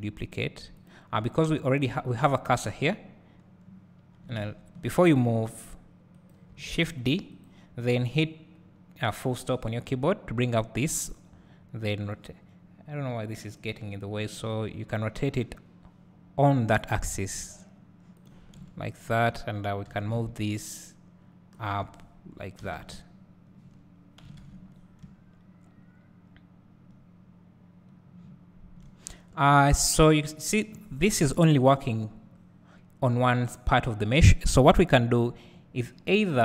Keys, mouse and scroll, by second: 4.5 ctrl+z, 5.6 r, 6.4 right click, 7.0 shift+d, 13.5 click, 14.5 r, 18.2 click, 18.6 `, 20.1 g, 21.7 click, 22.4 scroll down 2, 22.7 alt+a, 24.7-25.1 scroll down 2, 25.2 `, 35.8-36.4 scroll down 1.